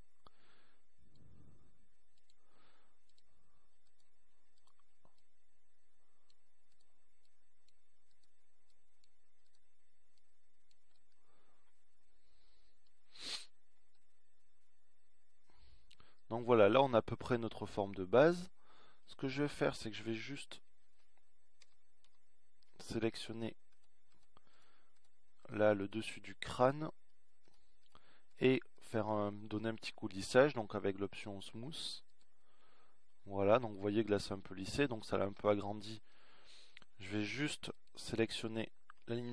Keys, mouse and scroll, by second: 1.9-3.7 middle drag, 3.7-5.5 drag, 6.3 click, 12.8 middle click, 14.8-15.2 scroll up 1, 15.2 middle click, 18.1-19.2 middle drag, 21.6-23.0 drag, 23.5 ctrl+KP_Add, 24.0 ctrl+KP_Add.